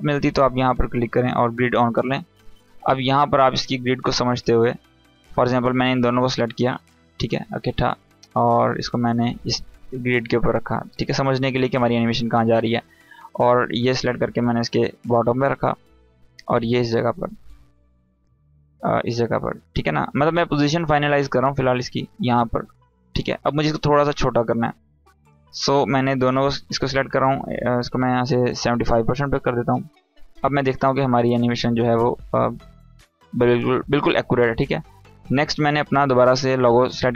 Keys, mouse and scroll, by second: 1.7 scroll up 1, 1.9 space, 2.0 click, 2.4-3.2 space, 6.1 space, 6.2 shift+click, 7.4 space, 7.5-8.1 click, 7.9 space, 8.6-10.1 drag, 13.0-15.2 drag, 25.6 click, 30.5 Down, 34.9 click.